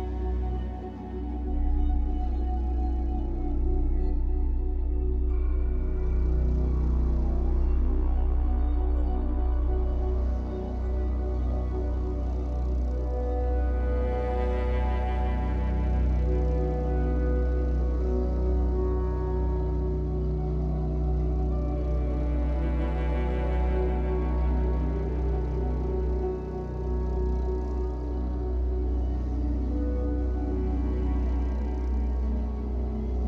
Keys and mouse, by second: 0.8 shift+click, 1.7 click, 2.5 click, 2.8 click, 4.2 click, 5.2 click, 5.9 shift+click, 7.2 ctrl+p, 8.6 Down, 8.8 Down, 9.0 Down, 9.2 Down, 9.4 Down, 9.6 Return, 11.2 click, 12.4 r, 12.7 x, 12.8 x, 14.6 Escape, 15.9-17.7 ctrl+alt+drag, 16.6 typing, 18.4 ctrl+alt+click, 18.7-19.4 typing, 19.5 click, 19.9-21.1 drag, 20.9-21.6 typing, 22.0 ctrl+alt+click, 23.5 shift+click, 23.6-24.3 typing, 24.4 ctrl+alt+click, 26.4 shift+click, 27.2 click, 27.7 click, 28.3 click, 29.1-32.0 typing, 32.5 Return.